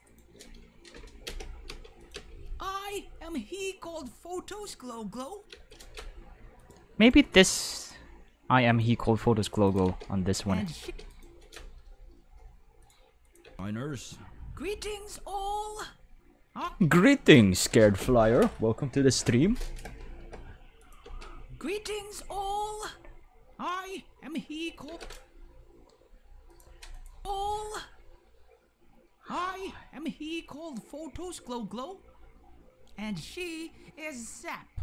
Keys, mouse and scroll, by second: 0.1 right click, 0.9 k, 1.2 space, 1.7 space, 2.0 click, 2.1 space, 5.5 space, 5.7 right click, 6.2 g, 6.6 click, 7.0 right click, 7.2 g, 7.8 click, 8.7 right click, 8.9 g, 9.4 click, 9.7 right click, 9.9 space, 10.5 right click, 10.8 space, 11.1 right click, 11.8 g, 12.8 drag, 13.2 click, 13.4 space, 16.6 space, 20.8 click, 21.1 space, 24.9 space, 25.0 right click, 25.9 g, 26.5 click, 26.9 click, 27.1 space.